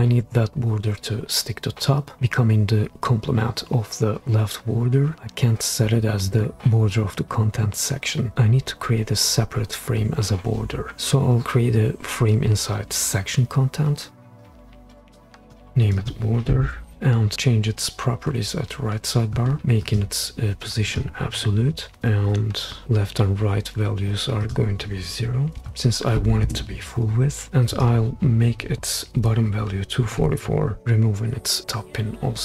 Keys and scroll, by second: 14.0 f, 15.6 f, 25.6 0, 26.4 Return, 29.1-30.2 typing, 30.9 Return.